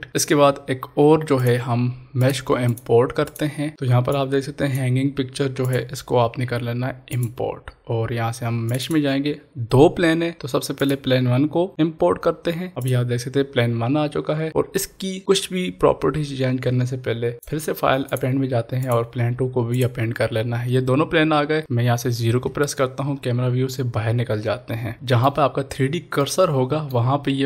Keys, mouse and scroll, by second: 0.1 ctrl+s, 1.4-5.6 drag, 4.5-5.0 drag, 10.8 click, 12.7 click, 17.3 click, 22.9 scroll down 1, 24.9 shift+middle click, 25.6-26.2 scroll up 1, 26.2 middle click, 27.3-27.4 scroll up 1.